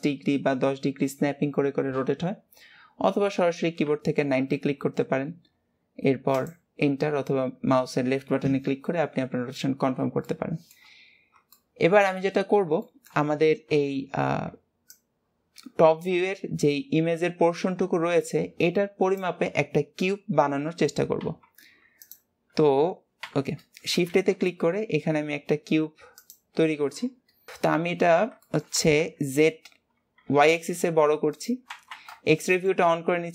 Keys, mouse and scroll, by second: 10.4 shift+middle click, 11.3-11.7 scroll up 1, 11.7 shift+middle click, 12.5 scroll up 1, 13.0-23.4 shift+middle drag, 27.6 middle click, 27.8 shift+middle click, 28.1-28.4 scroll down 2, 28.6 shift+middle click, 28.9 s, 32.5 shift+middle click, 33.2 scroll up 1.